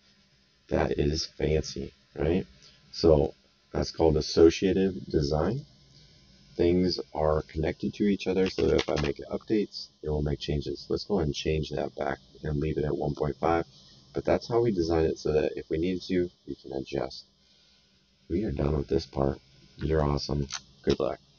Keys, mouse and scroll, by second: 5.3 click, 7.3 click, 8.4 KP_1, 8.5 n, 8.7 KP_5, 8.9 Return, 13.0 click, 14.2 right click, 17.2 middle click, 17.6 right click, 19.3 middle click.